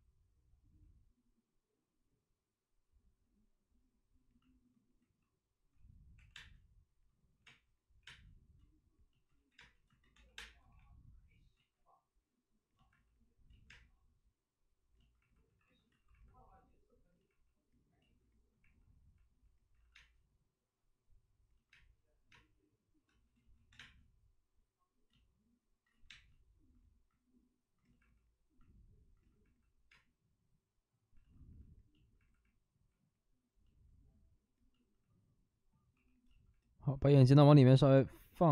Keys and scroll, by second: 5.9-7.9 typing, 9.3 ctrl+z, 9.5-11.5 typing, 11.5 ctrl+z, 13.6 ctrl+z, 13.6 space, 15.4 d, 18.0 alt+s, 18.0 ctrl+z, 18.0 d, 19.7 alt+s, 19.9 space, 22.3 space, 23.3 ctrl+z, 23.3 space, 23.7 3, 25.9 ctrl+z, 26.0 space, 29.9 space, 31.1 alt+s, 35.9 w.